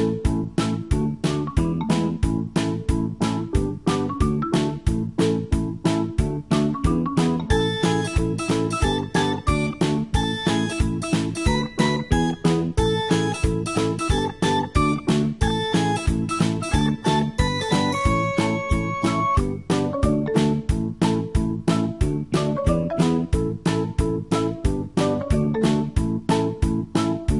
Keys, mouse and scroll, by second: 0.0-2.7 typing, 0.1 click, 0.3 click, 1.3 Up, 2.1 click, 2.4 ctrl+click, 3.1 click, 4.4 v, 4.6 click, 5.3 ctrl+c, 5.5 click, 6.2 e, 6.4 click, 8.2-11.2 typing, 8.6 click, 8.9 shift+click, 9.1 click, 9.6 click, 10.8 click, 11.5 click, 13.2-16.2 typing, 13.6 alt+click, 14.0 click, 14.5 click, 14.9 click, 15.3 shift+click, 15.9 click, 16.5 click, 17.2 v, 17.5 r, 17.9 alt+click, 18.2 Escape, 18.6 ctrl+r, 18.8 click, 19.2 ctrl+z, 19.3 click, 19.6 shift+click, 19.9 r, 20.2 alt+click, 20.6 alt+c, 20.8 ctrl+d, 21.4 click, 21.6-25.0 typing, 21.6 click, 21.9 Delete, 22.0 click, 22.2 Delete, 22.3 click, 22.6 click, 22.9 click, 23.3 shift+click, 23.9 click, 24.2 click, 24.8 ctrl+click, 25.3 click, 26.1-27.3 typing, 26.4 alt+click, 26.8 click.